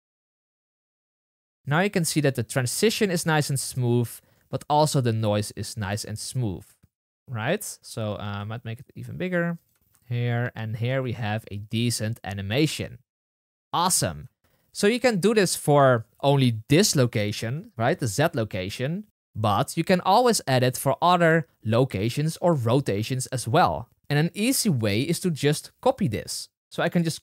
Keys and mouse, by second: 5.8 space, 7.6 space, 9.7 space, 14.2 space.